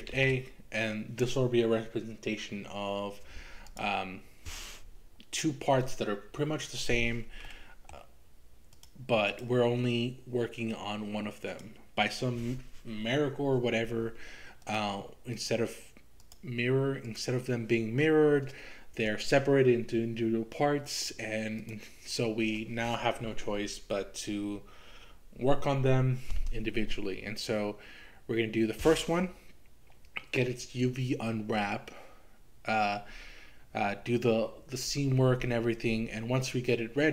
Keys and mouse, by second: 0.1 shift+a, 7.5 middle click, 8.8 click, 9.3 click, 10.8-11.8 drag, 15.4 click, 16.3 click, 21.6 click.